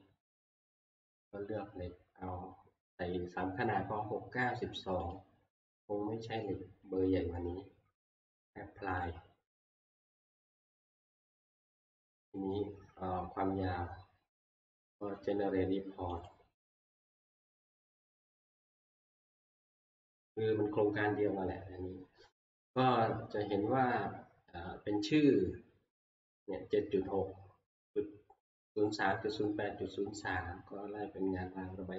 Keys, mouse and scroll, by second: 1.2 click, 5.2 click, 6.4 middle click, 6.4 click, 6.5-8.8 scroll, 8.8 scroll down 5, 9.0 click, 10.9-11.6 scroll, 12.5-16.6 middle click, 16.2 scroll up 7, 16.3 click, 18.4 click, 19.6 click.